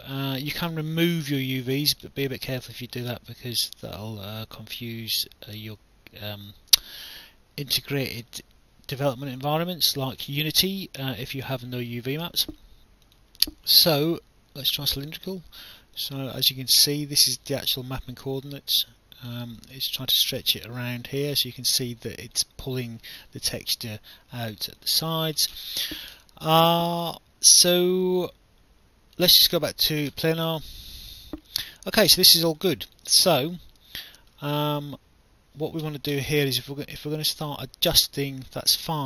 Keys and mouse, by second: 11.2 alt+click, 15.0 click, 16.0 alt+click, 18.5 alt+click, 19.6 alt+click, 21.4 alt+click, 24.8 alt+click, 29.2 click, 30.7 click, 31.3 alt+click, 32.8 alt+click, 33.4 alt+middle click, 37.5 right click.